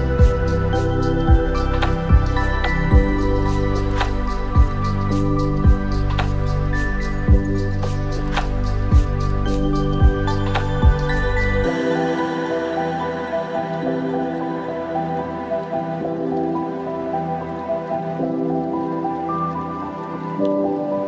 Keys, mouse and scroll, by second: 4.4-5.4 scroll up 4, 5.0-5.8 middle drag, 6.0-7.2 shift+middle drag, 7.4 scroll up 1, 8.1-8.8 middle drag, 9.1-9.6 shift+middle drag, 9.7 scroll up 1, 9.8-10.6 middle drag, 10.6 scroll down 1, 10.8-11.3 shift+middle drag, 11.4-12.3 scroll up 2, 12.3 Tab, 13.0 click, 13.6 alt+click, 15.6 f, 16.3 scroll down 2, 17.2 shift+middle click, 17.9-18.3 scroll down 1, 18.3-19.3 middle drag, 19.6 shift+middle click, 20.2-20.9 scroll down 2, 20.6 middle click.